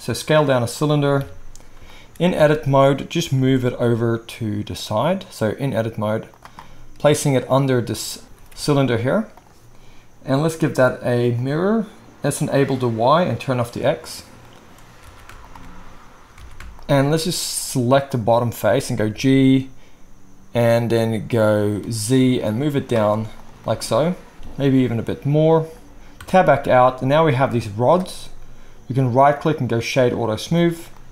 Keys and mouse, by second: 1.1 KP_3, 2.3 Tab, 3.3 g, 7.2-10.4 right drag, 8.2 g, 10.4-12.7 middle drag, 12.7-13.8 right drag, 13.8 middle click, 13.9-15.2 right drag, 15.0 alt+a, 15.4 alt+shift+click, 16.4 alt+a, 16.7 alt+shift+click, 19.1 g, 23.2-30.4 right drag, 24.3 g, 26.2 Tab.